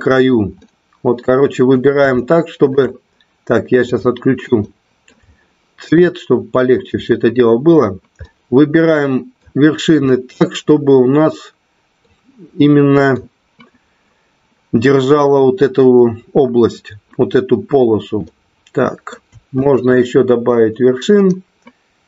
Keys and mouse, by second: 0.6-1.6 middle drag, 2.1 shift+middle click, 3.9 click, 4.6 middle click, 5.2 shift+middle click, 8.3-9.4 middle drag, 10.1-12.0 middle drag, 12.6 middle click, 18.3 middle click, 19.6 shift+click, 21.1-22.0 middle drag.